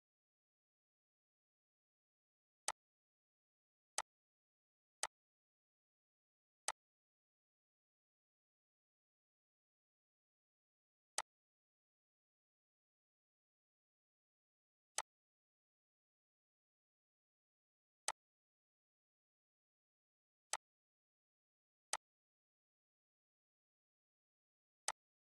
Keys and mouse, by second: 0.0 ctrl+o, 2.3 click, 13.4 ctrl+x, 14.6 click, 16.8 ctrl+v, 17.7-23.3 drag, 23.3 ctrl+c, 24.5 click.